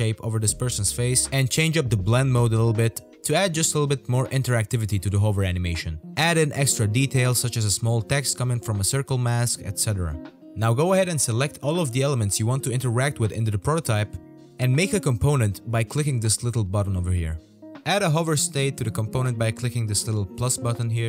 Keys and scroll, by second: 0.1 v, 0.5 v, 2.7-6.4 typing.